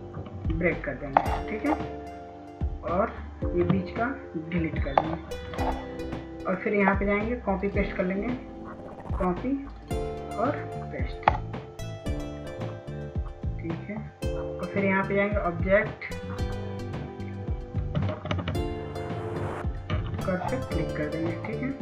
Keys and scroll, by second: 0.0 ctrl+s, 0.7 ctrl+s, 5.3 Delete, 19.1 ctrl+s, 19.9 ctrl+s, 20.4 ctrl+s.